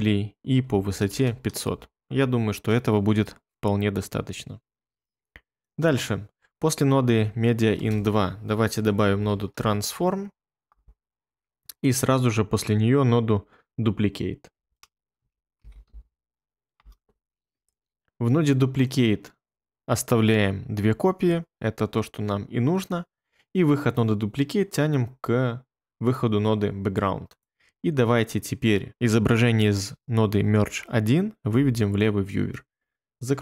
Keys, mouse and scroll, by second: 0.4-1.9 typing, 1.7 Return, 7.7-10.0 typing, 10.6 Return, 15.1-16.3 typing, 16.7 Return, 31.5 1.